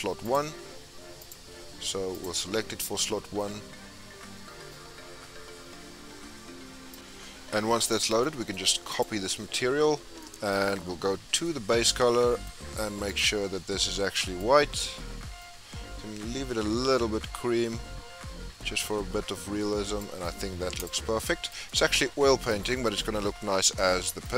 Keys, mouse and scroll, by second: 0.2-6.5 drag, 7.2-7.9 scroll up 5, 7.9-9.0 scroll down 2, 9.0 click, 9.4-10.2 scroll down 3, 10.2-14.4 shift+middle drag, 14.4 click, 20.4 scroll up 5, 20.9 click, 21.1 scroll down 2, 21.2-24.3 middle drag.